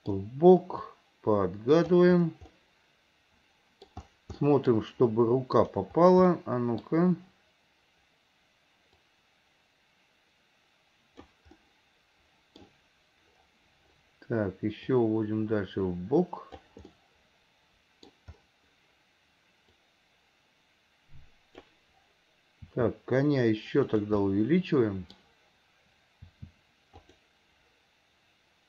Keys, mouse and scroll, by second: 0.9 click, 2.5-3.9 middle drag, 3.9-4.4 scroll down 1, 4.4-4.8 scroll up 1, 5.6-6.4 drag, 6.4-6.9 middle drag, 9.2-11.3 drag, 11.6-12.6 scroll up 1, 12.6-15.0 scroll down 1, 15.0-16.7 drag, 16.9-18.1 middle drag, 16.9-18.1 scroll up 1, 19.9-21.8 drag, 24.3-25.7 middle drag.